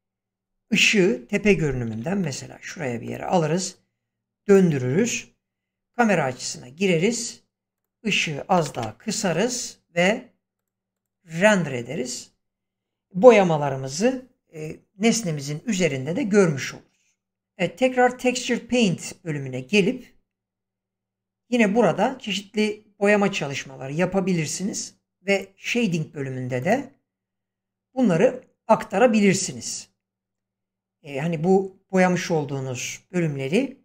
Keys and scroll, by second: 0.8 7, 1.9 g, 5.0 0, 8.5 5, 8.7 Return.